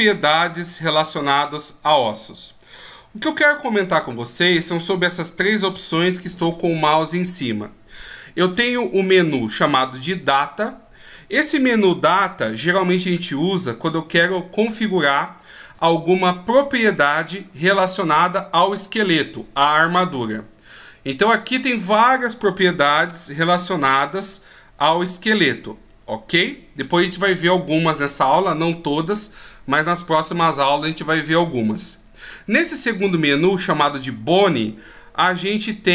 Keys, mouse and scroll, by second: 0.0-0.6 scroll up 6, 21.5 click, 33.6 click.